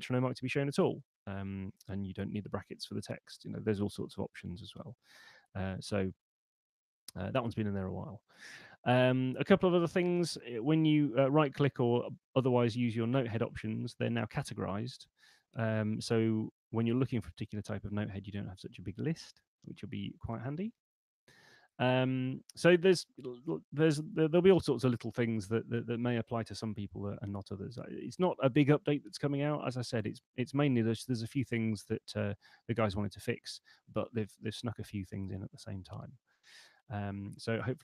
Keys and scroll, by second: 24.2 super+8.